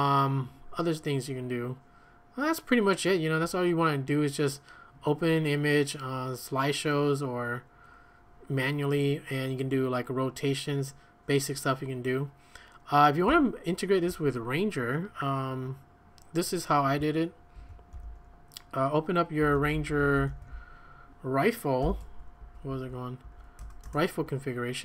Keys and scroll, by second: 13.3 q, 17.5 ctrl+a, 17.9 8, 19.2-21.8 typing, 22.0 Tab, 22.4 Tab, 22.7 Tab, 23.2 Tab, 23.6 Return, 23.8 Return.